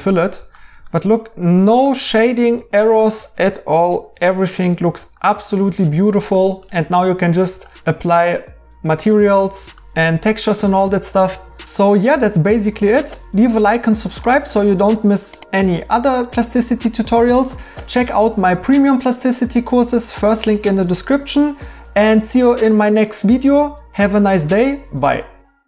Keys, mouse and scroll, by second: 13.6 right click, 16.1 right click, 17.8 right click.